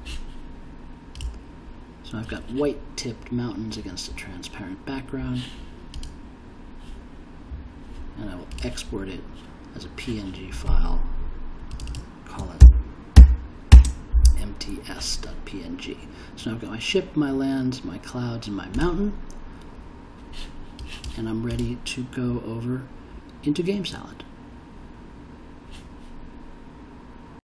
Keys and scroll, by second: 12.6 shift+m, 13.1 shift+t, 13.7 shift+s.